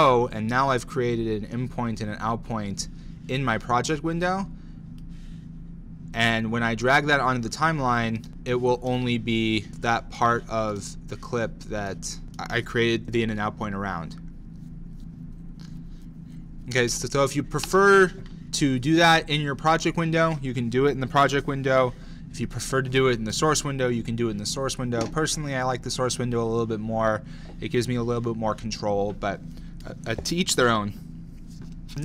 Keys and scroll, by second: 13.0 Left, 17.0 space, 17.7 space, 23.4 BackSpace.